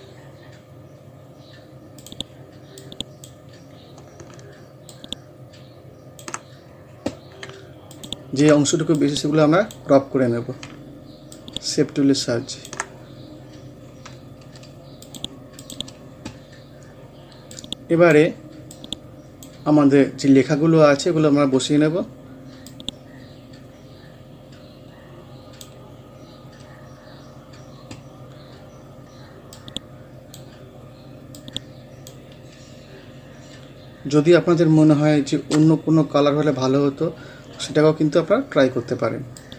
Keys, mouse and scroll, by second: 3.5 scroll up 1, 4.9-6.5 ctrl+drag, 6.5 scroll down 1, 7.9 ctrl+click, 10.0 scroll up 1, 10.7-11.4 ctrl+scroll up 1, 11.4-13.0 ctrl+drag, 13.0 scroll down 1, 15.1 click, 15.9 scroll down 1, 17.5-20.0 drag, 20.0 scroll up 1, 22.7-26.5 drag, 26.5 scroll down 1, 28.4-29.6 scroll up 1, 29.6-32.4 drag, 32.4 scroll up 1, 33.6-35.4 scroll down 1, 39.4-39.5 drag.